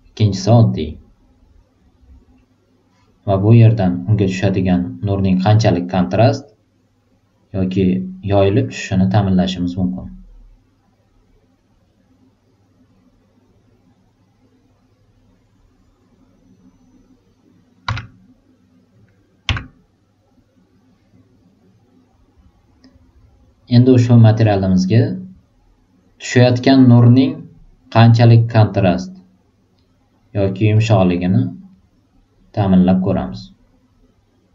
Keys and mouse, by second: 3.7-9.2 drag, 17.8 z, 19.4 z, 30.7-31.5 drag, 33.6-34.5 drag.